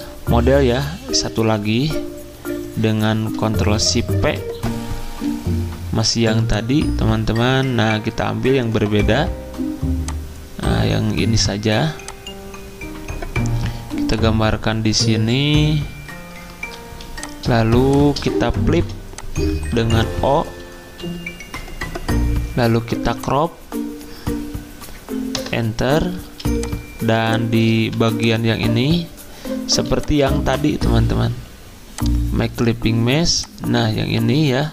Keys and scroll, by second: 16.9 z, 18.7 o, 20.8 c, 25.4 Return, 26.2 z, 27.8 v, 29.7 z.